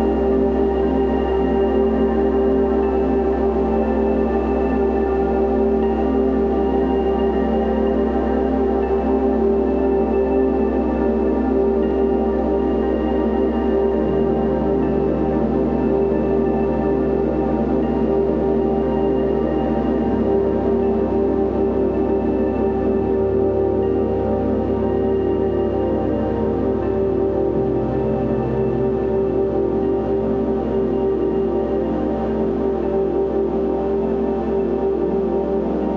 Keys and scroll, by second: 27.3 ctrl+shift+z.